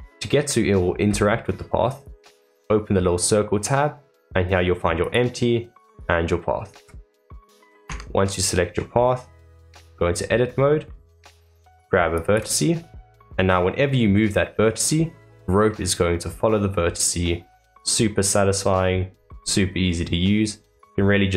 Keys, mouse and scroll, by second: 2.0 click, 5.0 click, 5.8 click, 7.8 Tab, 8.6-8.9 scroll down 1, 8.9-10.4 middle drag, 10.4 scroll down 2, 10.8-12.1 middle drag, 12.1 click.